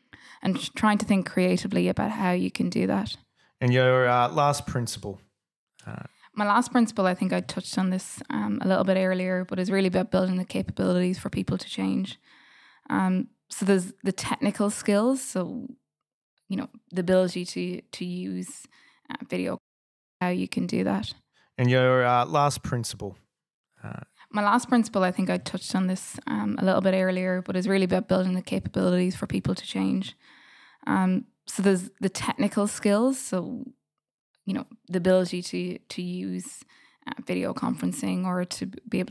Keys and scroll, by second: 10.2 F8.